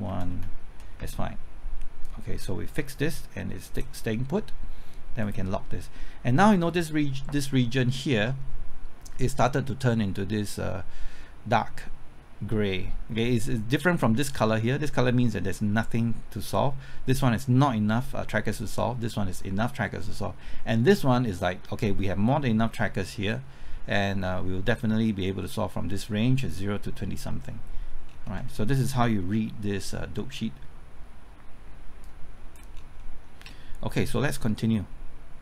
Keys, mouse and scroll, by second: 0.8 alt+Left, 2.0-4.1 drag, 6.0-7.1 middle drag, 28.1 scroll down 1, 32.0 click, 32.7 scroll down 1, 33.0 middle click, 33.4 scroll up 1, 34.4-35.4 drag.